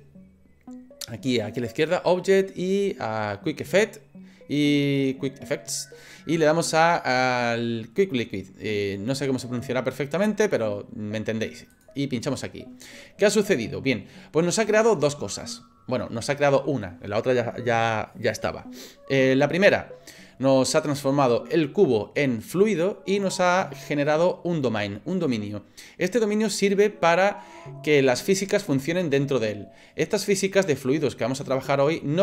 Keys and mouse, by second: 1.8-12.1 drag, 23.8-25.3 middle drag.